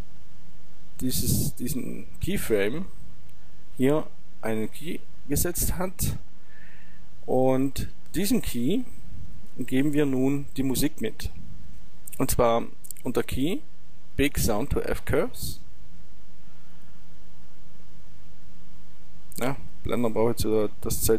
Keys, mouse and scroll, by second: 8.3 click, 12.2 click, 15.6 click, 21.0 click.